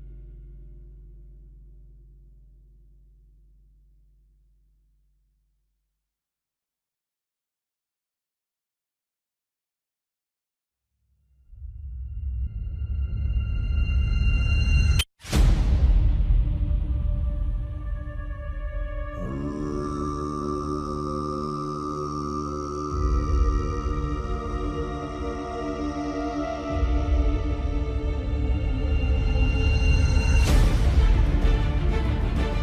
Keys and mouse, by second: 0.8 2, 3.7 click, 5.2 s, 9.2 click, 10.4 s, 13.4 click, 14.3 s, 16.9 3, 17.7 click, 19.0 s, 23.7 KP_7, 25.1 shift+middle click, 25.9 KP_3, 27.7 KP_7, 29.0 z, 29.8 shift+middle click, 30.8 shift+click.